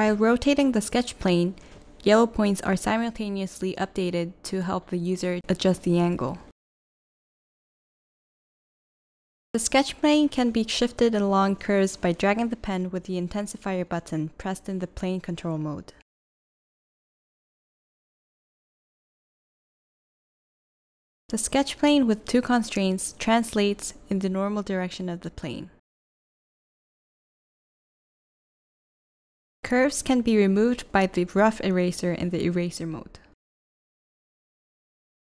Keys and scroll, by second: 1.4 v, 3.2 p, 4.5 v, 8.8 p, 9.9 i, 12.4 v, 22.4 i, 24.2 v, 29.0-29.8 typing.